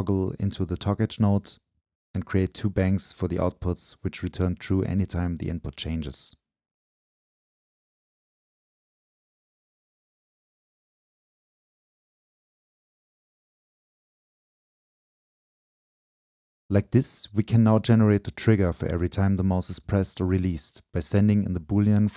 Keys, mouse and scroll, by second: 0.0-1.2 drag, 2.0-3.0 drag, 3.5 click, 3.9-4.5 right drag, 4.5-5.1 drag, 5.1-5.7 right drag, 5.7-6.8 drag, 6.8-7.6 right drag, 7.6 click, 8.1-8.7 right drag, 8.7-9.8 drag, 9.8-18.0 right drag, 19.9 Delete.